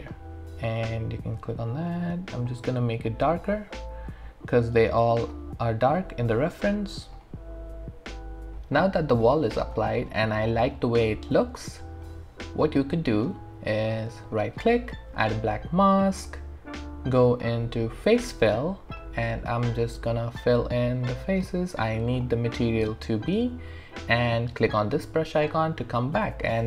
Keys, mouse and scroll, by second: 0.0 click, 5.2 click, 8.8 alt+right click, 9.2-12.9 alt+drag, 14.1 right click, 17.3 click, 17.3 click, 24.9 click, 26.2 alt+middle click.